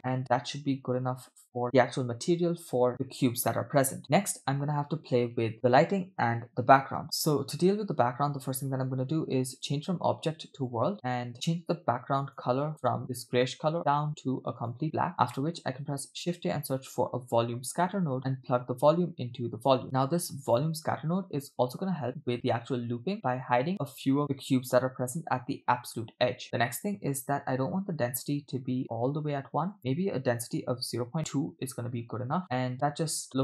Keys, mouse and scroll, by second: 0.3-0.6 scroll down 2, 1.5-2.9 scroll down 4, 2.9 space, 8.3 space, 9.5-10.8 drag, 10.9 middle click, 11.3 click, 12.3 click, 15.1 click, 15.4 middle click, 15.7 shift+a, 18.5-19.8 drag, 19.8 middle click, 19.8-20.2 scroll up 2, 20.5 click, 26.4 scroll down 3, 26.7 middle click, 27.3-28.2 scroll up 3, 29.7-31.4 drag, 32.4-33.4 typing.